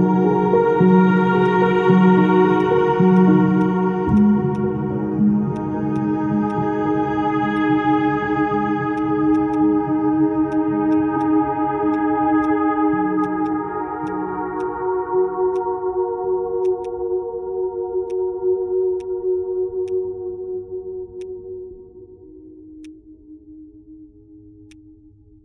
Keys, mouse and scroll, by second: 3.6 ctrl+click, 9.5 double click.